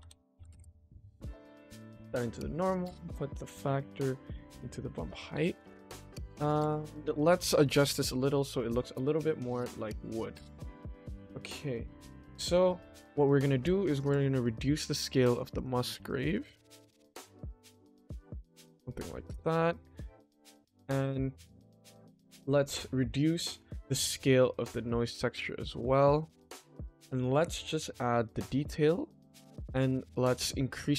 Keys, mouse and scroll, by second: 1.7-2.3 drag, 3.1-4.4 drag, 5.0 click, 6.2 shift+middle click, 7.5 shift+middle click, 8.7-9.2 shift+middle drag, 10.3-11.4 scroll up 1, 14.7 click, 14.8 click, 15.0 click, 15.2 click, 15.4 click, 15.7 click, 15.9 click, 16.3 click, 16.7 click, 16.8 click, 17.3 click, 17.6-19.3 drag, 19.6-20.8 shift+middle drag, 24.2-27.5 drag, 28.1-29.8 drag, 30.4 click.